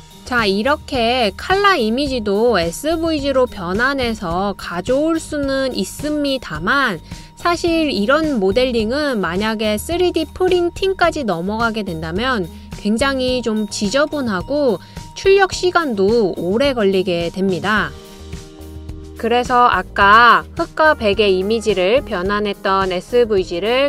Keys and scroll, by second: 4.4-5.2 typing, 8.3-9.1 typing, 12.0-14.3 typing.